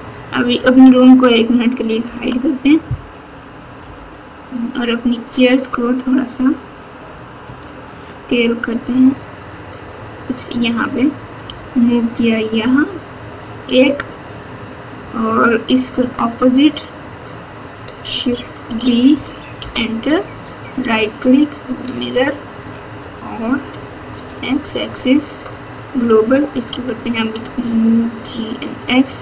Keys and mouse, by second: 0.7 click, 2.1 h, 3.8 KP_7, 5.6 click, 7.4 s, 11.4 g, 18.7 shift+d, 20.4-25.6 drag, 26.7 g.